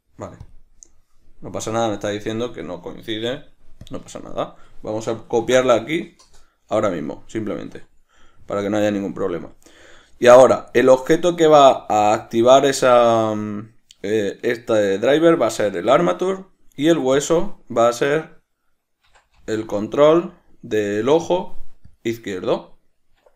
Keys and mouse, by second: 6.6 Return.